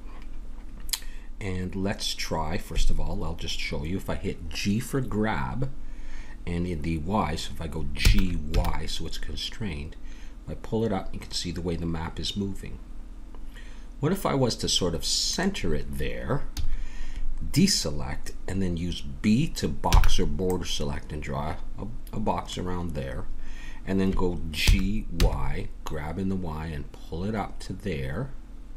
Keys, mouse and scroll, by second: 8.0 g, 16.5 a, 20.1 b, 24.6 g.